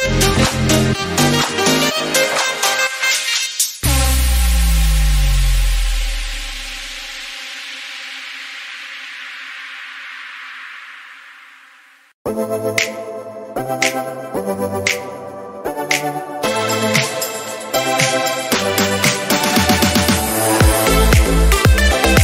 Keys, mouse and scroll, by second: 0.3 shift+click, 0.5 shift+click, 1.2 ctrl+p, 1.4 click, 1.6 click, 2.0 g, 2.5 click, 2.7 click, 3.0 click, 3.0 g, 3.6 scroll down 4, 3.7 click, 3.9 middle click, 4.1-4.7 scroll up 4, 4.8-13.3 drag, 12.5 t, 13.3 r, 14.1 click, 14.7 KP_Decimal, 15.1 KP_0, 15.4 scroll down 1, 15.5-16.0 scroll up 4, 16.8 click, 17.6 r, 18.8 scroll up 2, 19.0 r, 21.3-22.0 drag, 22.0 r.